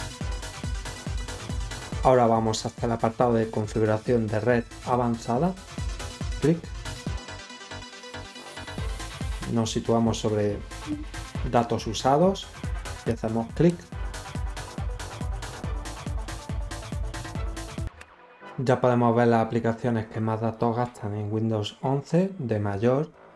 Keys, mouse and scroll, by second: 0.9-1.6 scroll down 6, 5.7 click, 8.9 scroll up 4, 13.0 click, 13.0 right click.